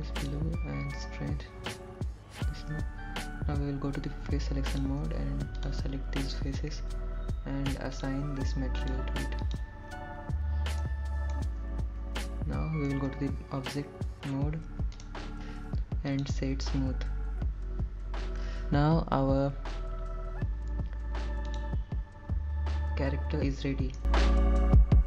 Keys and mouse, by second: 2.8 click, 7.5 3, 8.0 click, 8.8 shift+click, 11.2 click, 12.1 click, 12.7 click, 14.1 middle click, 16.2 Tab, 18.2-19.5 right drag.